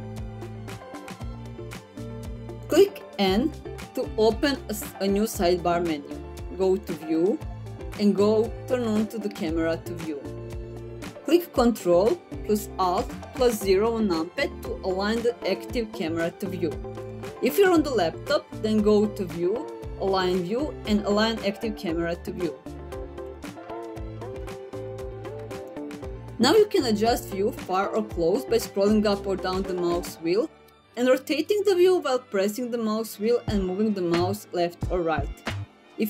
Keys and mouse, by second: 5.7 n, 7.3 click, 10.4 click, 19.3-22.9 drag, 23.7 click, 24.8 click.